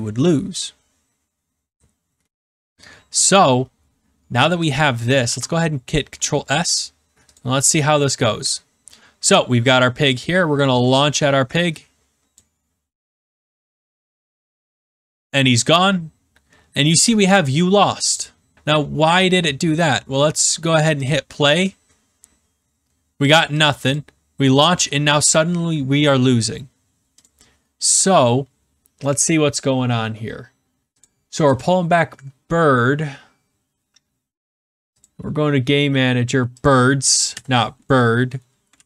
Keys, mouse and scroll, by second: 4.7 click, 5.2 ctrl+s, 7.3 click, 12.3 click, 19.1 click, 21.0 click, 23.9 click, 27.1 click, 29.1 click, 31.0 click, 31.5 click, 35.0 click, 36.6 click, 37.3 Delete, 38.7 ctrl+s.